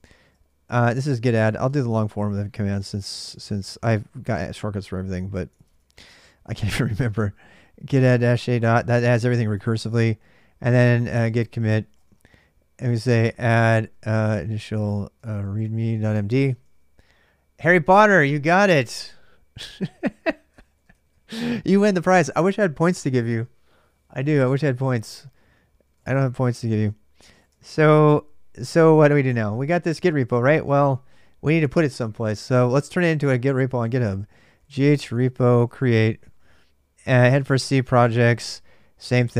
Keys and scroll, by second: 0.0-4.3 typing, 5.4-16.9 typing, 19.5-21.4 typing, 25.6-39.3 typing, 37.0 Return.